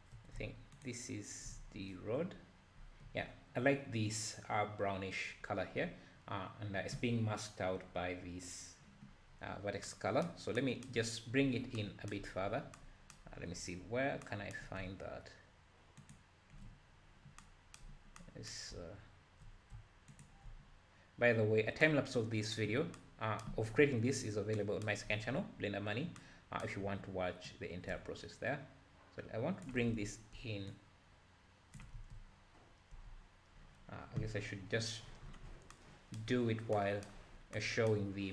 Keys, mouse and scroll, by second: 0.9 ctrl+shift+click, 1.7-2.2 scroll down 3, 2.8-3.1 scroll up 1, 5.9-6.9 scroll down 2, 9.3-10.6 scroll down 2, 16.1 ctrl+shift+click, 20.2 ctrl+shift+drag, 21.0-21.5 scroll up 2, 27.9-30.1 drag, 30.1 ctrl+z, 30.7-32.1 shift+drag, 32.1 ctrl+z.